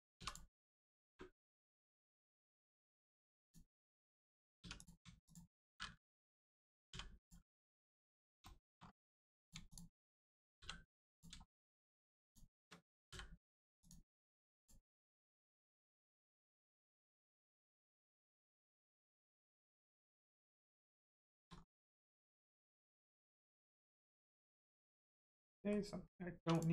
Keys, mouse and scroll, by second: 0.1 2, 0.2 click, 1.0 space, 1.8 right click, 3.4 click, 4.5 1, 4.7 click, 5.2 shift+click, 7.1 click, 7.4 scroll down 1, 7.7 shift+middle click, 8.7 scroll up 1, 9.3 click, 9.6 shift+click, 10.5 j, 11.1 click, 11.4 shift+middle click, 12.2 shift+click, 13.0 m, 13.7 click, 14.9 middle click, 15.2 shift+middle click, 16.3 middle click, 16.4 middle click, 19.4-19.8 scroll down 1, 19.9 middle click, 20.3 shift+middle click, 21.4-21.8 scroll up 1, 21.9 middle click, 23.1 scroll down 1, 23.4 middle click, 24.3 scroll down 1, 24.6 middle click, 26.3 3, 26.4 click.